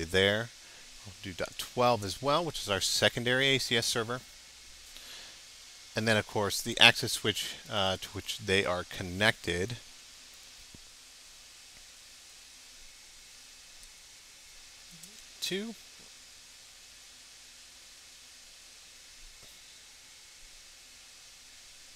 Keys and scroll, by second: 2.4 shift+BackSpace, 7.8 Up, 8.1 BackSpace.